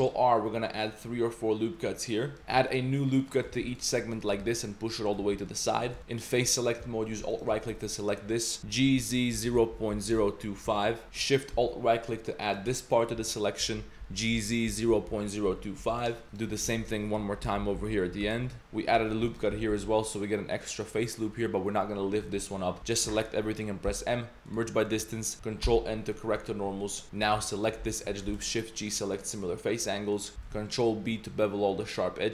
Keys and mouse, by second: 2.4 ctrl+r, 2.4 ctrl+z, 2.5 ctrl+r, 3.7 ctrl+r, 4.6 ctrl+r, 5.4 ctrl+r, 7.3 alt+click, 7.6 shift+middle click, 8.6 g, 11.2 shift+Tab, 12.5 alt+shift+click, 14.0 g, 16.7 g, 18.6 middle click, 19.1 3, 19.5 g, 22.3 Tab, 22.5 drag, 22.9 Tab, 22.9 a, 23.9 m, 25.7 ctrl+n, 26.2 shift+drag, 26.4 shift+middle click, 26.8 drag, 27.4 2, 27.6 alt+click, 27.8 middle click, 28.3 shift+g, 30.0 middle click, 30.4 ctrl+b.